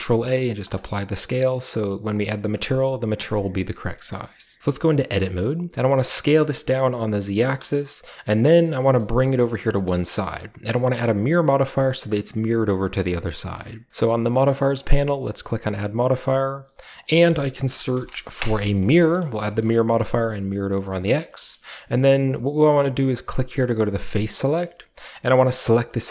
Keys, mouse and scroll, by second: 0.6-1.1 drag, 1.1-3.8 middle drag, 1.1-1.7 scroll up 1, 3.1-3.8 scroll down 1, 4.0-4.6 middle drag, 4.6 Tab, 5.0-7.4 scroll up 1, 5.9 s, 6.2 z, 7.4 shift+click, 7.7-8.4 shift+scroll up 1, 8.4-12.2 middle drag, 8.4 scroll down 1, 8.8 g, 9.5-12.2 drag, 9.7-10.9 scroll up 1, 10.9-11.8 shift+scroll up 1, 11.8-12.2 shift+scroll up 1, 15.2 click, 17.0 click, 18.4 Return, 18.4 typing, 19.3-20.2 shift+scroll up 1, 19.4 shift+middle click, 19.6-20.6 shift+middle drag, 20.2 shift+click, 20.2-22.1 shift+scroll up 1, 20.5 shift+click, 20.8 shift+click, 20.8 typing, 22.1-22.8 shift+scroll up 1, 22.8-23.9 shift+scroll up 1, 23.9 shift+scroll up 1, 24.1-25.3 drag, 25.3-26.1 scroll down 1.